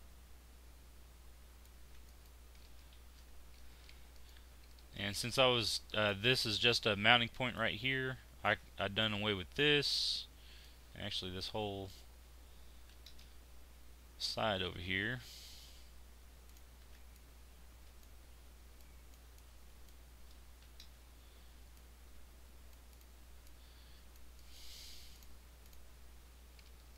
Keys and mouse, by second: 1.8 z, 4.2-5.2 drag, 8.6 z, 9.2 click, 12.9 x, 16.8 z, 19.4 click, 20.6 x, 24.4-26.6 middle drag.